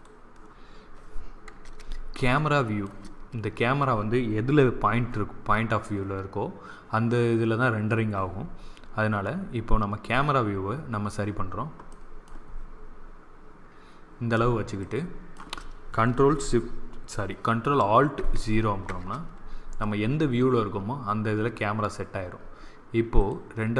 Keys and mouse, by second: 2.2 middle click, 4.7 KP_0, 9.3-11.8 middle drag, 18.1 ctrl+alt+KP_0, 23.1 click.